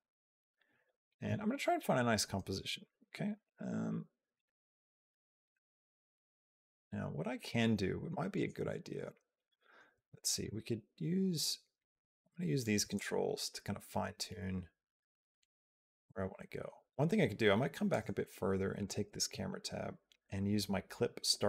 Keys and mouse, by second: 0.3 shift+click, 0.4 shift+middle click, 1.2 shift+middle click, 2.5 n, 2.9 shift+middle click, 4.3-5.4 middle drag, 5.8 shift+middle click, 10.5 shift+click, 12.8 shift+click, 18.6 click.